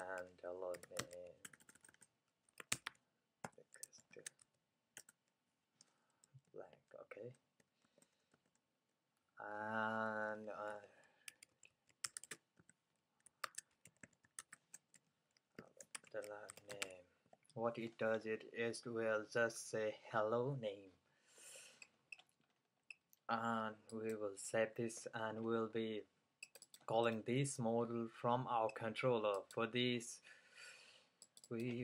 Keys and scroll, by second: 0.0-8.2 typing, 10.2-19.0 typing, 15.0 Right.